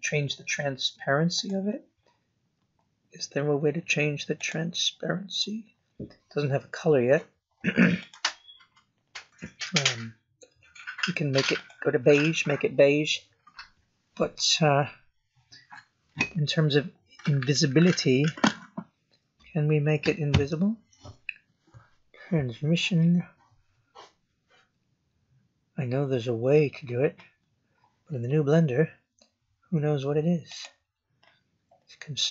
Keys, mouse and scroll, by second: 1.3 click, 4.3 click, 8.1 click, 14.9 scroll down 4, 15.8 scroll down 4, 16.6 scroll down 3, 18.6-19.3 scroll down 9, 21.5-22.0 scroll up 3, 22.2 scroll up 5, 24.1-24.6 scroll up 4, 25.1 scroll up 2, 26.4-26.9 scroll up 3, 30.4 click.